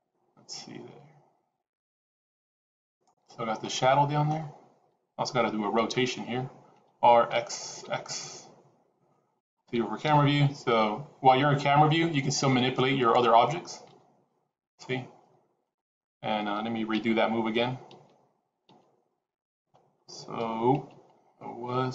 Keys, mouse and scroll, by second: 3.2-3.5 scroll down 5, 3.5 middle click, 6.7 r, 10.0 KP_0, 10.9-12.1 scroll up 4, 13.0 click, 13.8 g, 15.9 click, 17.0 ctrl+z, 18.0 ctrl+z, 18.7 ctrl+z, 20.8 ctrl+z, 21.5 ctrl+z.